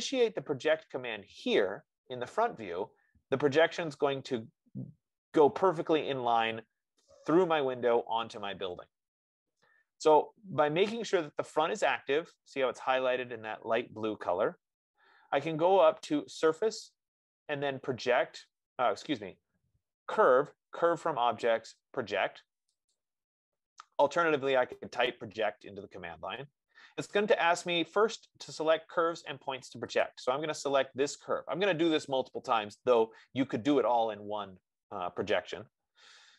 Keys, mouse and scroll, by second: 4.7 click, 11.7-16.6 drag, 14.4 F15, 17.0-21.9 drag, 23.3-28.4 drag, 30.3-35.3 drag.